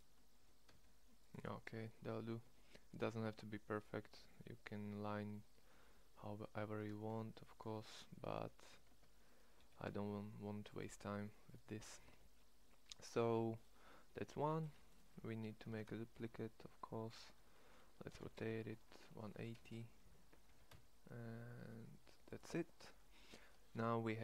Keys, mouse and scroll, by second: 0.3 g, 1.8 Tab, 2.4 Tab, 2.8-3.8 middle drag, 8.8 Tab, 9.5 g, 10.6 click, 12.0 Tab, 15.6 shift+d, 18.1 r, 20.4 g.